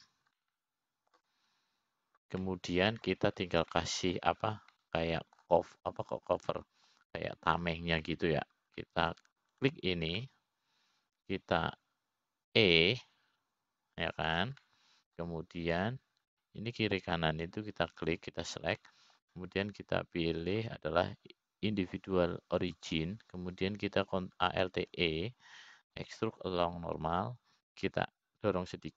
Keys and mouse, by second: 1.8 click, 2.3 click, 2.9 middle click, 5.0 middle click, 6.3 middle click, 7.3 middle click, 9.1 middle click, 11.4 middle click, 12.1 click, 12.8-14.3 middle drag, 15.1 e, 17.2 middle click, 18.3 click, 18.9 middle click, 20.6 shift+click, 21.4 middle click, 23.1-25.5 drag, 27.3 alt+e.